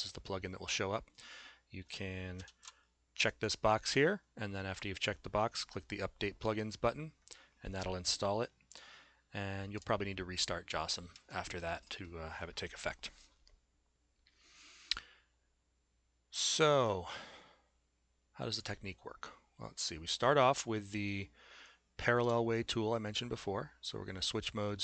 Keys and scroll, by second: 2.5 shift+z.